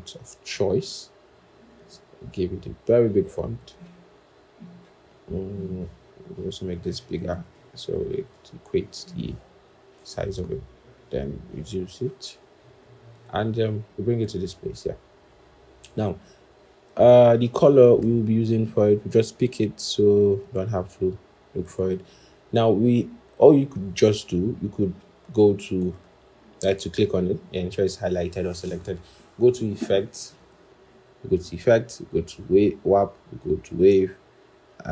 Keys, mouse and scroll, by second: 7.8 ctrl+shift+., 7.9 ctrl+shift+., 8.1 ctrl+shift+., 8.9 ctrl+shift+,, 9.9 ctrl+a, 10.5 alt+Down, 11.0 alt+Up, 11.2 alt+Up, 11.3 alt+Up, 11.9 alt+Up, 17.9 i, 20.3 typing, 22.8-23.5 scroll, 30.2 Return.